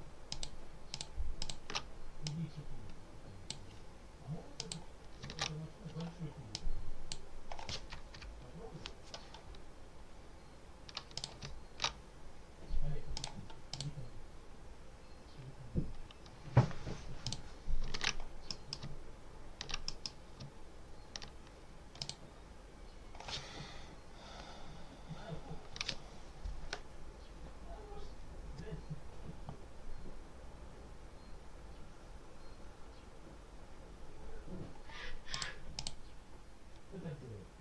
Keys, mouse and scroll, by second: 0.2 ctrl+alt+click, 0.8 ctrl+alt+click, 1.3 ctrl+alt+click, 2.1-3.6 drag, 4.4 click, 6.4 click, 8.0-8.6 scroll down 2, 11.0 click, 13.0 click, 13.6 click, 17.1 click, 17.8 ctrl+s, 18.4 ctrl+click, 19.0-19.5 ctrl+scroll up 4, 19.8 ctrl+click, 20.4-21.0 ctrl+scroll up 4, 21.9 click, 35.2 click, 35.6 click.